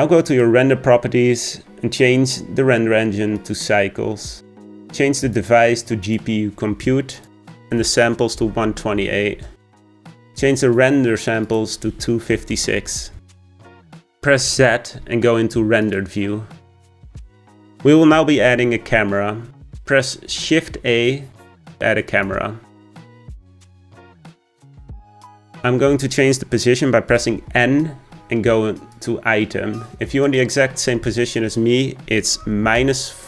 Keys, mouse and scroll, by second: 0.3 click, 1.4-4.4 drag, 5.2-10.2 drag, 11.5-14.3 drag, 14.3 z, 20.3 shift+a, 27.1 n, 29.0 click, 30.3-33.2 drag.